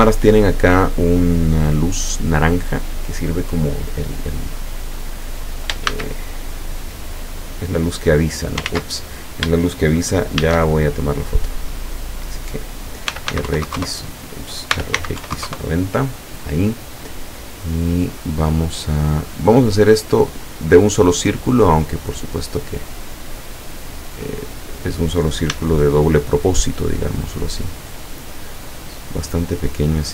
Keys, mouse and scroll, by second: 4.4-5.0 scroll down 2, 6.0 shift+a, 7.8 click, 8.7 ctrl+z, 10.5 shift+a, 11.5 click, 13.2 r, 13.4 x, 13.5 KP_Multiply, 13.7 KP_0, 13.8 KP_Enter, 14.8 r, 15.0 x, 15.3 KP_9, 15.4 KP_0, 15.5 KP_Enter, 17.8-19.5 drag, 19.7-20.8 middle drag, 21.7-25.0 drag, 25.6 s.